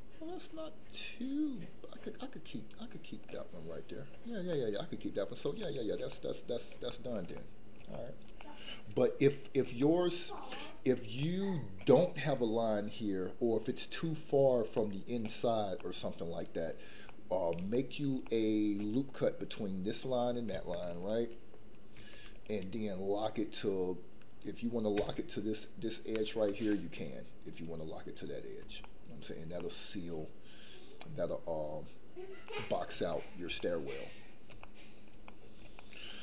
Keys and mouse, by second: 4.6 middle click, 5.6 shift+middle click, 6.3 middle click, 6.9 shift+middle click, 7.4 middle click, 8.0 shift+middle click, 8.6-9.6 middle drag, 9.8 shift+middle click, 10.3 middle click, 11.2 middle click, 14.7 middle click, 15.8 middle click, 17.2 middle click, 17.8 shift+middle click, 18.4 middle click, 21.9 ctrl+r, 26.1 ctrl+click, 26.7-28.6 middle drag, 28.8 shift+middle click, 29.7 middle click, 32.4 middle click, 33.2 shift+middle click, 33.7 middle click, 34.6 shift+middle click, 35.4 middle click, 35.9 shift+middle click.